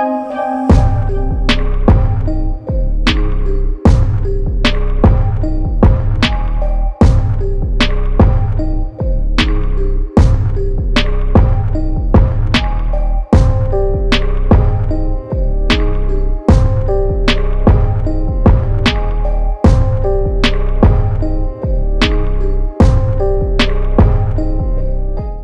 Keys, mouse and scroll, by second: 0.0-0.8 typing, 0.9 click, 2.8 ctrl+z, 3.1 v, 5.1 click, 10.2-19.4 alt+drag.